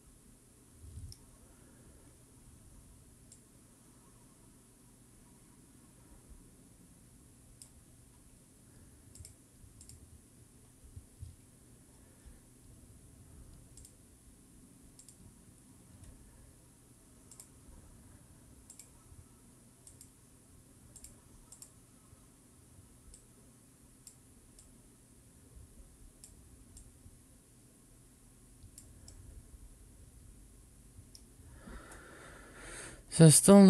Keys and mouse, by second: 3.4-7.6 drag, 9.2-9.9 drag, 13.9-15.1 drag, 17.3 click, 18.8-20.0 drag, 21.0 click, 23.1-24.1 drag, 24.7-26.2 drag, 26.8-28.8 drag, 29.0-31.4 middle drag, 33.4-33.6 drag.